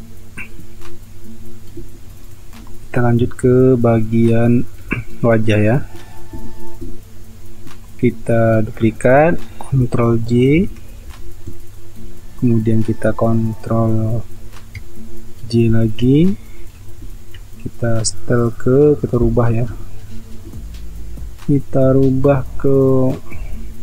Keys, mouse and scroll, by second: 2.4 space, 10.5 ctrl+j, 11.3 space, 15.6 ctrl+j.